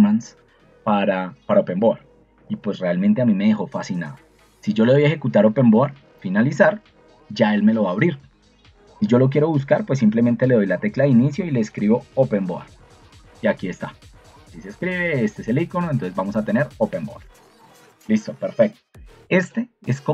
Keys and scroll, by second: 11.6-13.2 typing, 14.5 ctrl+2, 17.5 Escape.